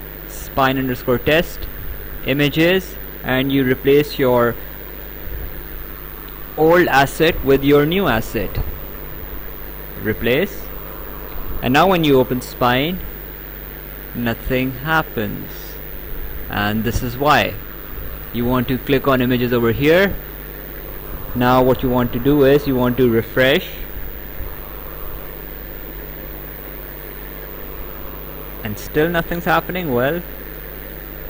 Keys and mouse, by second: 0.5 click, 1.8 click, 5.2 click, 8.5 click, 10.0 click, 12.4 click, 19.8 click, 23.4 click, 24.9 click, 25.7 right click, 26.9 click, 30.3 click.